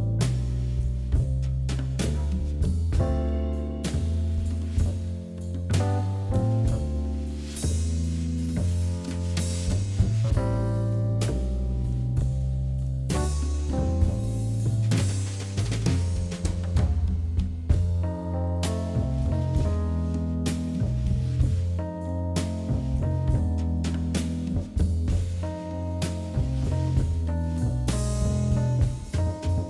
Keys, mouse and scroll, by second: 2.4 g, 3.2 middle click, 4.1 click, 4.4 shift+click, 4.6 shift+click, 4.8 middle click, 5.3 KP_1, 5.7 g, 7.2 middle click, 7.6 scroll down 2, 7.8-10.9 middle drag, 10.9 scroll up 3, 11.1 shift+middle click, 11.9 click, 12.8 scroll down 2, 13.0-14.2 middle drag, 14.2 KP_1, 14.6 shift+z, 15.3 shift+z, 15.7 middle click, 16.5 scroll up 2, 17.3 1, 18.0 click, 18.7 shift+click, 19.0 shift+click, 19.3 shift+click, 19.7 shift+click, 20.2 shift+click, 21.0 g, 22.3 click, 22.5 g, 23.5 g, 24.5 click, 24.8 g, 25.7 click, 25.9 scroll down 2, 26.2-27.9 middle drag, 27.9-28.6 scroll up 2, 28.6 click, 29.0 click, 29.5 shift+click.